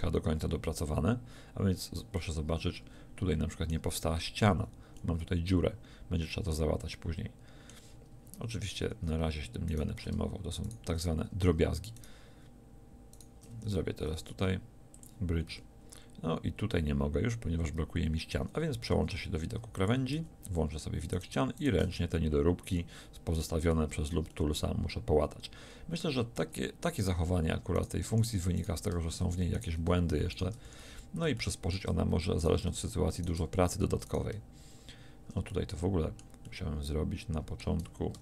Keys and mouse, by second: 0.3 a, 4.5 middle click, 4.5 z, 8.9 z, 9.7-15.0 drag, 14.2 w, 15.5 a, 18.9 ctrl+Tab, 20.1 z, 21.1 right click, 21.9 f, 26.4 middle click, 27.0-28.1 right drag, 28.1-30.6 drag, 28.1 f, 30.6 f, 30.8 a, 32.4-33.4 drag, 33.4 f, 38.1 ctrl+Tab.